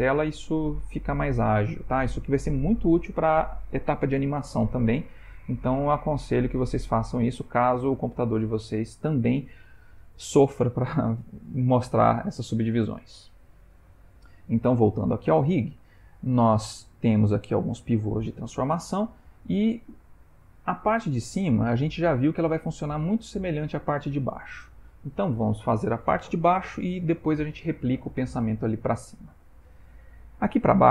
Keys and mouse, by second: 14.7 shift+middle click, 15.7 ctrl+middle click, 18.4 shift+middle click, 19.2 ctrl+middle click, 24.7 ctrl+middle click, 25.3 shift+middle click.